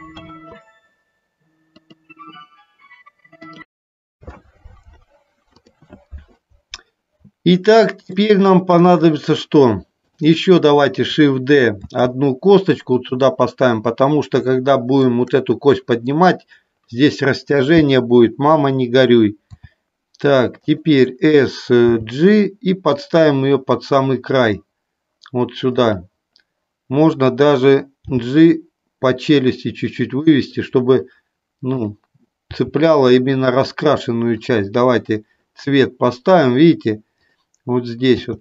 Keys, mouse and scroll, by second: 8.3 shift+middle click, 11.9 shift+d, 13.0 click, 14.5 shift+middle click, 20.6 click, 21.9 g, 25.8 click, 27.3 click, 30.3 click, 32.6 g, 33.4 click, 34.6 click, 38.3 g.